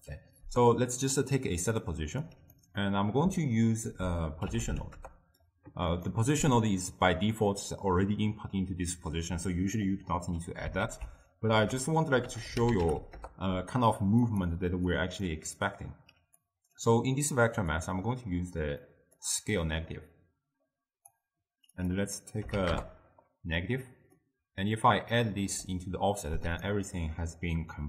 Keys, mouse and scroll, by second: 5.0 ctrl+a, 13.2 ctrl+a, 19.2-21.2 drag, 22.8-26.7 drag, 26.7-27.8 right drag.